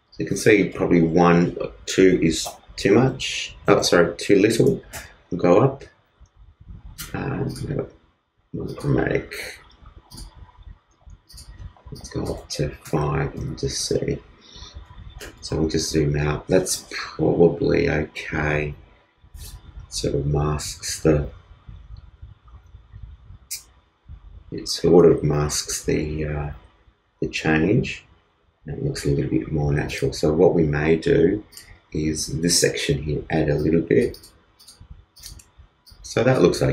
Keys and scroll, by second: 15.4 super+-, 25.5 super+=.